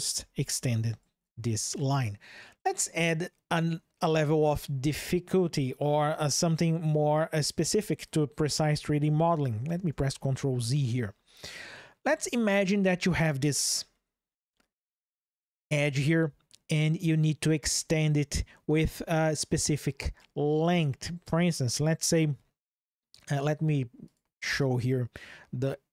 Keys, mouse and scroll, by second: 9.2 ctrl+z, 9.6 ctrl+z, 9.8 ctrl+z, 13.7 shift+click, 23.8-25.9 drag.